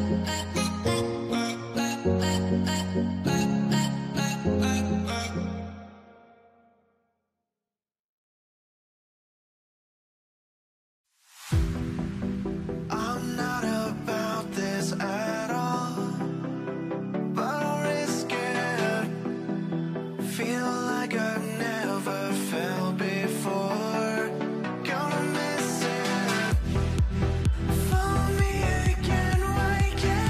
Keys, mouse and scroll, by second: 0.2 alt+w, 0.6 alt+w, 1.7 middle click, 3.4 scroll down 1, 3.6 alt+middle click, 4.1-4.4 scroll up 1, 4.4 middle click, 4.6-6.3 scroll down 1, 7.2 middle click, 7.4-8.8 scroll up 1, 8.7-9.6 typing, 9.2 scroll down 1, 10.2 alt+middle click, 11.2 alt+middle click, 11.4-13.7 alt+scroll up 2, 13.7-14.4 scroll, 14.4 r, 14.4 double click, 15.2 alt+middle click, 16.4 scroll down 1, 17.2 shift+click, 19.7 r, 20.6 scroll down 1, 21.0 ctrl+click, 21.2 middle click, 21.4 w, 21.5 scroll down 1, 22.0 shift+click, 23.9 scroll up 1, 24.0-24.6 scroll down 2, 24.2 middle click, 24.6 scroll up 1, 24.8 middle click, 25.1-25.8 scroll down 1, 25.8 middle click, 26.0 scroll up 1, 27.0 middle click, 27.3 z, 27.4 z, 27.5 scroll down 1, 28.3 middle click, 28.5-28.9 scroll up 1, 29.7 alt+middle click, 30.0 alt+scroll up 1.